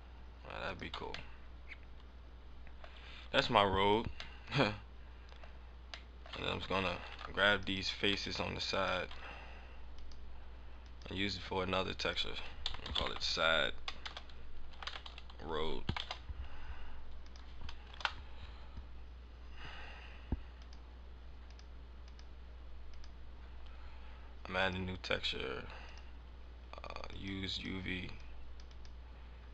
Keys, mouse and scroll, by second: 0.7 click, 0.8 click, 0.9 Tab, 1.3 middle click, 2.7 scroll up 3, 3.5 middle click, 3.9 scroll up 1, 4.4 middle click, 5.4 scroll up 1, 5.7 scroll down 3, 6.0 middle click, 6.3 Tab, 7.0 ctrl+Tab, 7.7 right click, 8.3 right click, 8.7 shift+right click, 9.9 click, 10.8 click, 11.9 click, 17.2 click, 20.5 click, 21.3 click, 22.0 click, 23.3-23.7 scroll down 3, 24.5 click, 25.9 click, 26.4 scroll down 4, 27.0 click, 27.4 click.